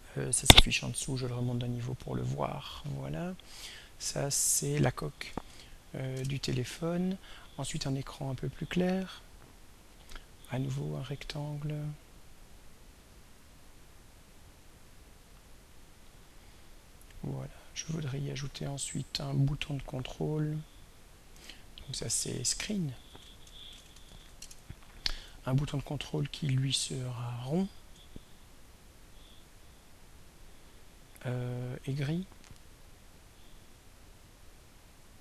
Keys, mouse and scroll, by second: 1.4 click, 4.0 click, 5.0-6.1 typing, 6.2 Return, 8.3 click, 9.8 click, 14.9-19.4 drag, 21.2 click, 22.9 ctrl+a, 23.2 ctrl+s, 23.4 ctrl+c, 23.7 ctrl+r, 24.1 ctrl+n, 24.4 Return, 26.8 click, 33.1 click.